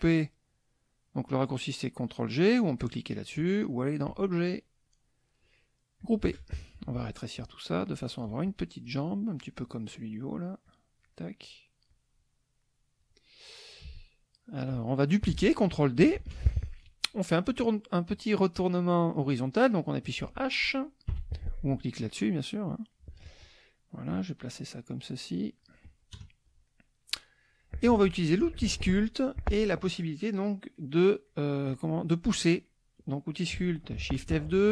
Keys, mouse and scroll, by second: 4.1 click, 6.0 click, 7.4-8.3 ctrl+drag, 8.5 ctrl+click, 9.9 middle click, 10.7 click, 11.1 middle click, 11.9-13.2 drag, 14.0 ctrl+click, 16.1 ctrl+d, 21.1 h, 24.1-25.8 drag, 26.1 KP_Add, 26.7 middle click, 28.4 shift+F2, 34.5 shift+F2.